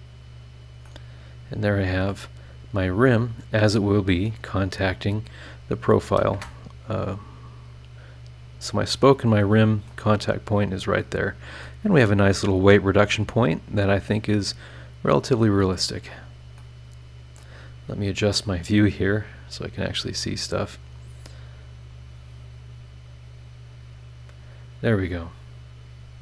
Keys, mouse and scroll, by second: 1.0-2.3 drag, 1.0-2.3 right drag, 2.3 middle click, 2.3-3.0 scroll up 4, 3.0-4.4 middle drag, 3.1-4.4 right drag, 4.6-5.3 scroll down 4, 5.8 click, 6.3 space, 9.4 middle click, 9.5 click, 9.5 right click, 9.5 scroll down 1, 10.2 click, 11.0 middle click, 11.1 click, 11.9 scroll down 2, 12.2 scroll up 2, 13.6 click, 14.0 scroll down 2, 14.3-15.9 middle drag, 14.4 click, 16.0-16.6 scroll up 2, 16.6 middle click, 18.3 click, 18.8 scroll down 1, 19.4 scroll up 1, 20.3 click, 20.7 click, 21.9 click, 22.7 click, 23.7 scroll down 1, 25.3 click.